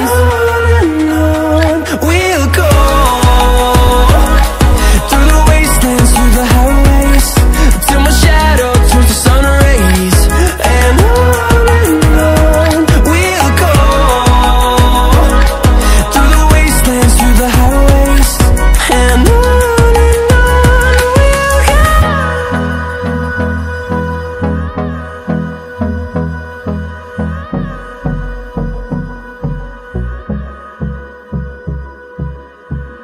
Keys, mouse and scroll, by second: 3.0 ctrl+w, 4.5-21.2 drag, 21.2 right click, 24.5 click, 26.2 ctrl+z, 27.1 right click, 30.0 click, 31.4-32.0 alt+scroll up 2, 32.0-33.0 drag.